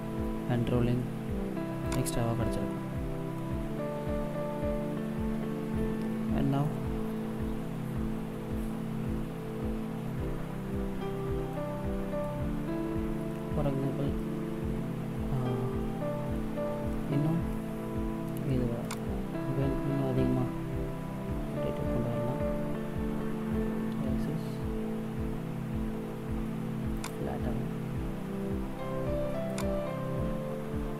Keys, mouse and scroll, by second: 1.7 click, 3.3 middle click, 11.4 middle click, 13.5 middle click, 16.2 middle click, 17.3 middle click, 18.7 right click, 21.1 r, 29.4 click.